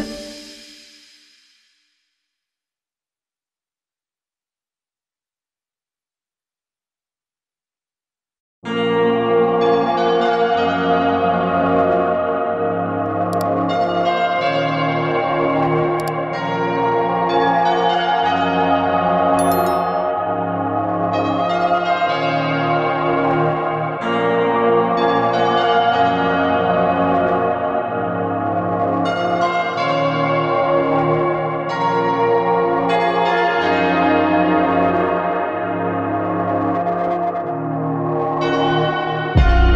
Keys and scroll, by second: 7.9 ctrl+z.